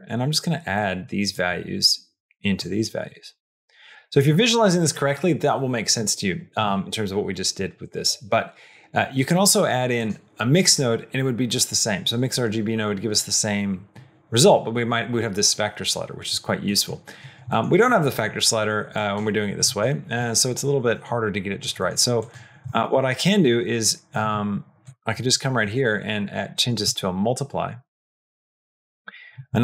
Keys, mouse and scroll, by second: 0.6 click, 1.2-2.6 drag, 3.9 middle click, 9.8 click, 16.6 middle click, 17.3 middle click, 18.8 click, 19.6 middle click, 21.7 middle click, 22.0 click, 22.6 shift+d, 25.5-27.9 drag.